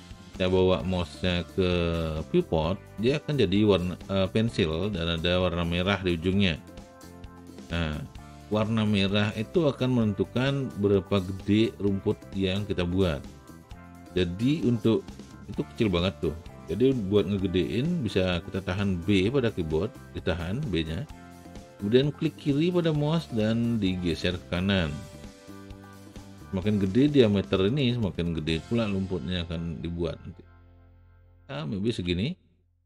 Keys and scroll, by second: 19.3 b.